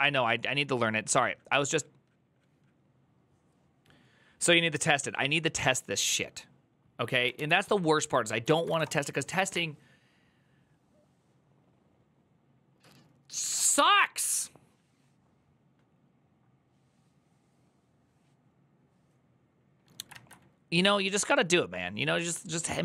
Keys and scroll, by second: 7.1 alt+{, 8.2-9.0 typing.